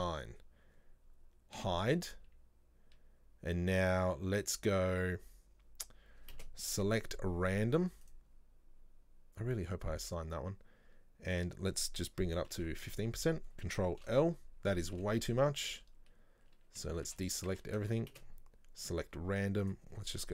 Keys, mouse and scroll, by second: 0.0 click, 1.7 h, 6.4 space, 11.5-14.1 drag, 14.1 ctrl+l, 15.1 ctrl+z, 16.8 a, 17.2 a, 18.2 space, 19.7-20.3 drag.